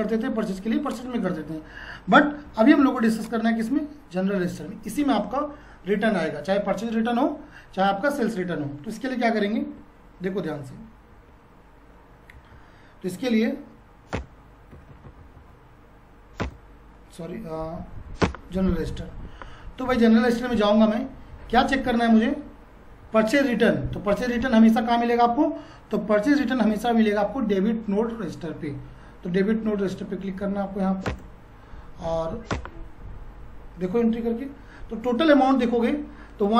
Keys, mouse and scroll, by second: 3.2-7.2 ctrl+drag, 12.5 F4, 14.1 Return, 14.7 Down, 16.4 Return, 17.8 Down, 18.2 Return, 21.3 Down, 26.2 F4, 30.5 F4, 31.0 Return.